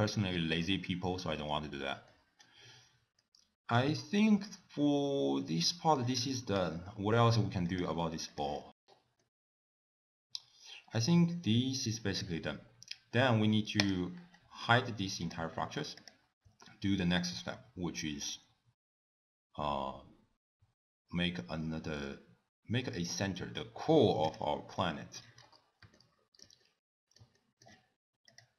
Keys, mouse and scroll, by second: 0.3 middle click, 0.7-1.7 scroll down 4, 2.1 middle click, 2.7-3.2 scroll down 2, 3.2 middle click, 5.5 middle click, 6.6 click, 7.7 click, 7.9 g, 8.8 scroll up 3, 9.2 middle click, 13.8 click, 15.2 click, 15.9 click, 16.7 shift+a, 24.3 click, 24.8 middle click, 25.4-25.9 scroll up 3, 25.9 shift+middle click, 26.6 middle click, 27.4 shift+middle click, 28.3 click.